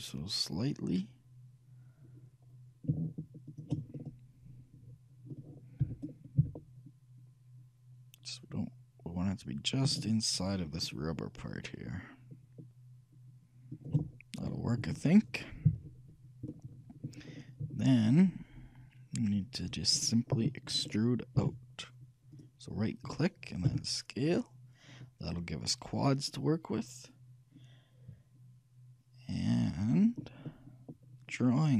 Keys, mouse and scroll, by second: 4.1-5.8 middle drag, 6.0 g, 15.8 KP_3, 18.1 middle click, 18.5-21.1 scroll down 1, 21.1 middle click, 21.5 e, 24.0 s, 30.1 middle click, 30.6-31.7 middle drag.